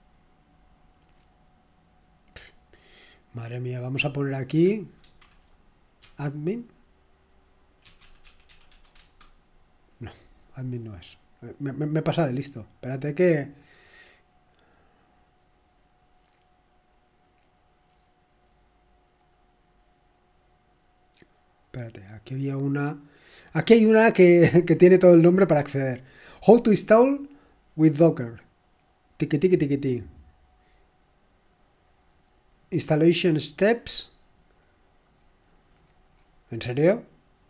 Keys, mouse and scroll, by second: 0.5-1.2 scroll down 1, 1.2-2.9 scroll up 2, 2.9 click, 3.7 click, 4.2 click, 5.2-6.5 typing, 7.6-9.2 typing, 11.0 click, 13.7 click, 21.5 click, 23.3 click, 24.5 click, 29.2-29.8 scroll down 2, 29.8-30.3 scroll up 2, 31.8 click, 35.7-37.4 scroll down 3.